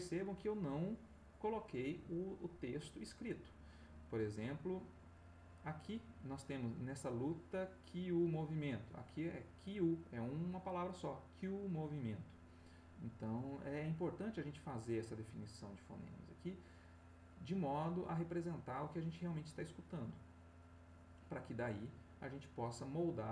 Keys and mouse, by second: 7.2-9.5 drag, 13.6 click, 15.6 middle click, 17.5-21.7 drag, 22.7-23.3 drag.